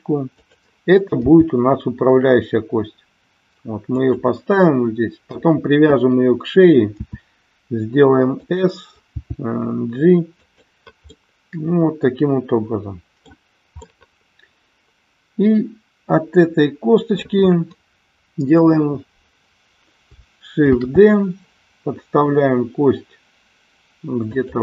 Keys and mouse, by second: 0.4 click, 1.3 g, 3.9 click, 6.9 s, 8.3 click, 9.2 g, 10.4 click, 11.0-13.3 middle drag, 13.8-17.2 middle drag, 24.3 click.